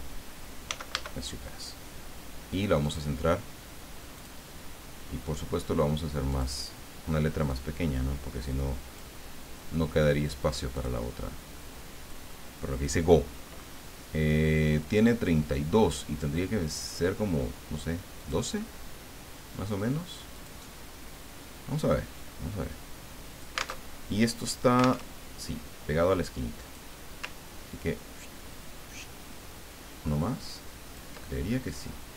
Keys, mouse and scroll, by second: 0.0-0.6 typing, 0.9 Caps_Lock, 2.8 click, 4.2 click, 6.3 click, 7.4-9.3 drag, 10.7 click, 18.2 click, 20.3 click, 22.1-23.8 drag, 23.8 alt+Tab, 25.1 alt+Tab, 26.6 click, 27.7-31.3 ctrl+drag.